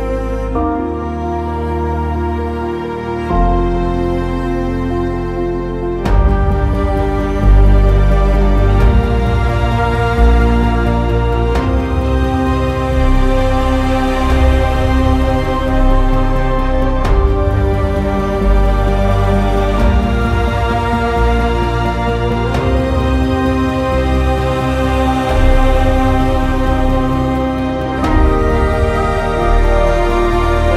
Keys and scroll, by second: 1.7 Delete, 4.7 w, 7.3 e, 18.2 w.